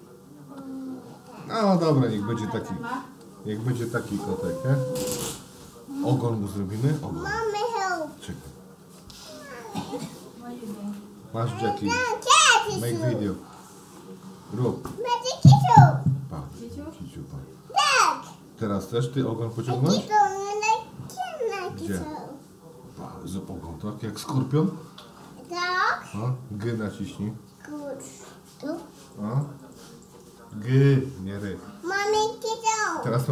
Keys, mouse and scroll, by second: 2.3 middle click, 8.3 click, 9.2 shift+click, 10.0 shift+click, 10.6 shift+click, 12.5-13.6 middle drag, 15.2 e, 16.6 e, 20.8 g, 29.7 r.